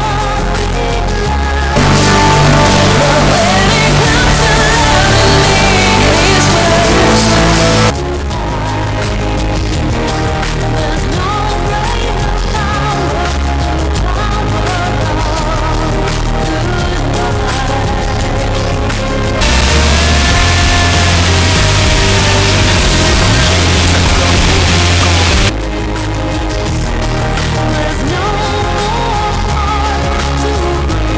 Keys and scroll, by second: 8.2 Page_Down, 25.7 Page_Down.